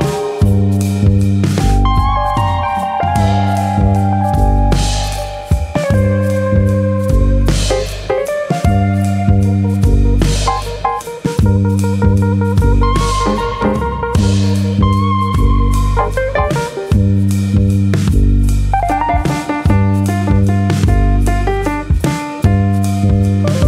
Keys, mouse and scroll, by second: 2.0 ctrl+z, 2.7 click, 3.7 ctrl+z, 4.6 click, 5.3 s, 6.1 click, 7.8 click, 13.7 scroll up 3, 14.0 shift+middle click, 14.3-15.2 scroll down 1, 15.2 click, 15.2-16.1 scroll down 1, 16.6 scroll down 1, 17.4 shift+middle click, 18.3 middle click, 19.3 KP_3, 19.9 click, 20.4 shift+middle click, 20.8 shift+middle click, 21.1 click, 22.0 middle click.